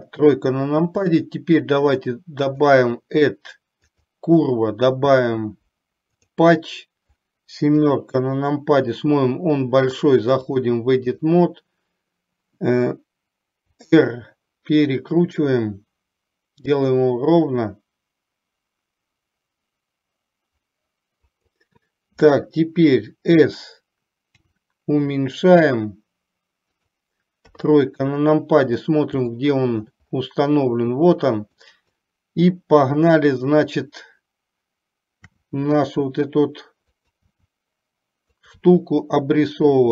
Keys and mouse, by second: 2.7-6.4 drag, 7.8 KP_7, 10.6-11.6 drag, 13.8 r, 24.4 s, 27.6 KP_3, 29.4 shift+middle click, 31.8 click, 35.4 e, 37.4 e.